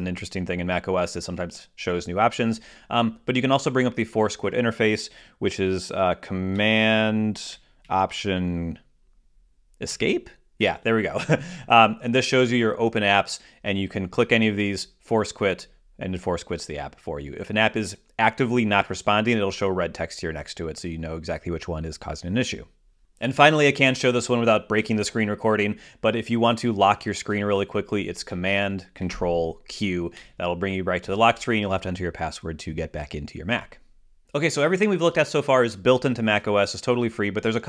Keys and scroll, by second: 10.3 alt+super+Escape.